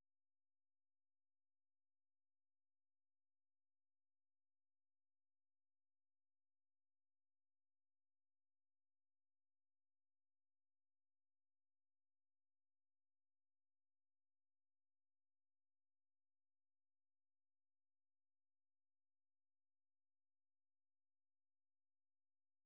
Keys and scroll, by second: 0.9 ctrl+x, 1.1-4.4 typing, 8.0 alt+Tab, 16.4 ctrl+c, 16.9 super+1, 18.6 Escape, 19.2 ctrl+v, 19.5 Return.